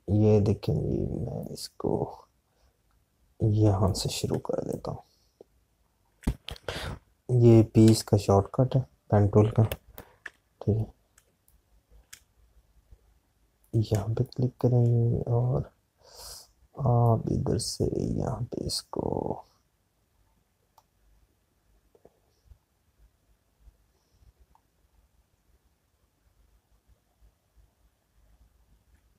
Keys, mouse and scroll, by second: 0.1 space, 5.1-6.1 drag, 6.1 space, 10.1 p, 14.9 space, 21.4-29.1 drag.